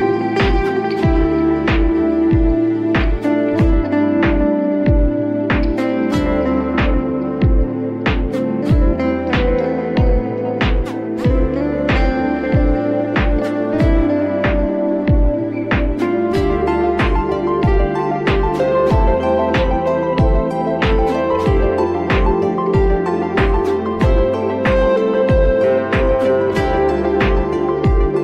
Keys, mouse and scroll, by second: 0.3 click, 1.8 ctrl+z, 2.9 shift+click, 3.5-3.9 scroll up 2, 3.9 middle click, 4.9 shift+click, 5.4-5.8 scroll down 1, 5.8-7.6 middle drag, 7.6 scroll up 1, 7.8-8.6 middle drag, 8.6 click, 9.4 a, 11.0 s, 13.7 g, 16.1 click, 16.6 middle click, 17.4-18.2 scroll up 1, 18.2-18.5 scroll down 2, 18.5-19.8 middle drag, 19.8 scroll up 1, 19.9 middle click, 20.7 Tab, 21.0 click, 21.4-21.7 scroll up 1, 21.7-22.3 middle drag, 22.3-22.7 scroll up 1, 22.7-23.2 shift+middle drag, 23.2-23.8 scroll down 1, 23.8 middle click, 24.0 scroll up 3, 24.5 shift+a.